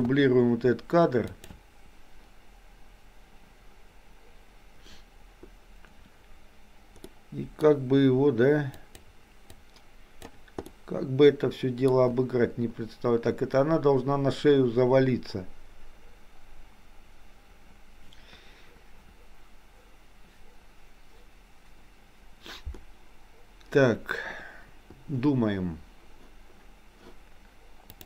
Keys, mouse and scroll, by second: 0.0 shift+d, 7.1-7.6 middle drag, 8.9 click, 9.6 click, 10.6-11.9 middle drag.